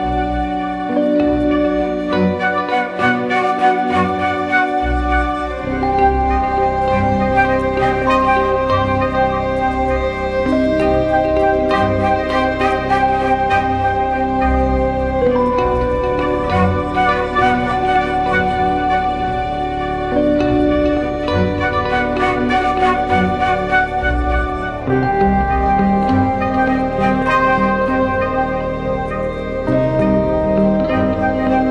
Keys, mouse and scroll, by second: 1.9 alt+shift+click, 4.5 Return, 5.8 ctrl+t, 7.8 Return, 8.2 Down, 9.1 Down, 9.3 Down, 9.5 Down, 9.7 Down, 14.3 Down, 14.5 Down, 15.6 Up, 17.5 Down, 17.6 Down, 17.8 Down, 17.9 Down, 18.1 Down, 18.9 Up, 19.2 Up, 20.4 Right, 20.5 Right, 20.7 Right, 20.9 Right, 21.0 Right, 21.2 Right, 21.3 Right, 21.5 Right, 22.7 ctrl+-.